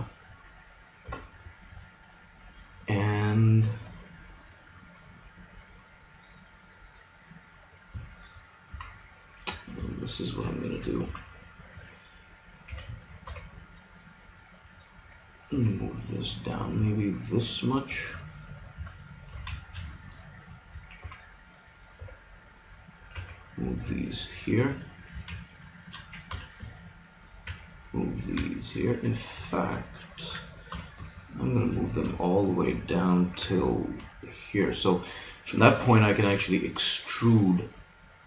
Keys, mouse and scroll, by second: 1.5-3.1 middle drag, 5.0 middle click, 5.1-7.4 middle drag, 8.7 KP_3, 11.1 z, 12.7 a, 13.3 b, 15.5 g, 19.3 a, 21.0 g, 22.0 b, 23.1 g, 25.1 a, 25.4 click, 26.3 b, 27.5 g, 29.0-30.7 middle drag, 30.7 b, 32.7 click, 33.4 g, 35.6 click.